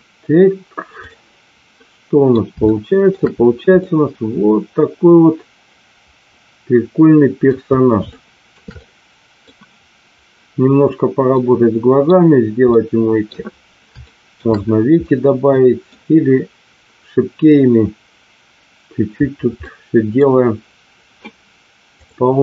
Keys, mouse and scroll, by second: 1.7 middle click, 2.6-2.9 shift+middle drag, 3.7-7.5 middle drag, 8.1-8.6 shift+middle drag, 8.7-9.3 middle drag, 11.3 middle click, 12.7 middle click, 14.0 shift+middle click, 15.0 middle click, 19.6-20.2 middle drag, 22.0 click.